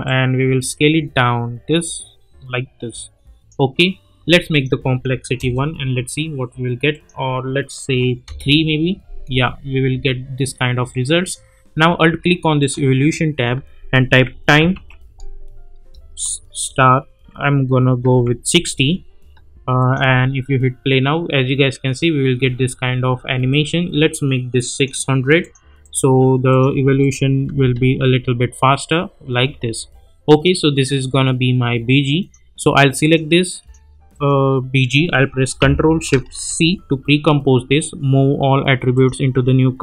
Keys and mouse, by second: 5.4 Return, 6.9 click, 8.2 Return, 9.3 space, 10.9-11.5 drag, 13.9-15.2 typing, 16.5 shift+8, 18.0 6, 19.8 click, 20.0 space, 22.4 space, 23.5 click, 27.5 space, 29.4 space, 30.3 click, 36.4 ctrl+shift+c, 38.9 click.